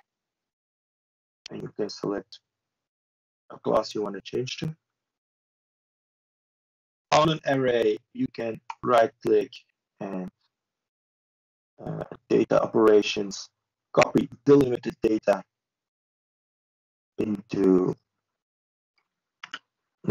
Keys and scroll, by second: 0.0 ctrl+space.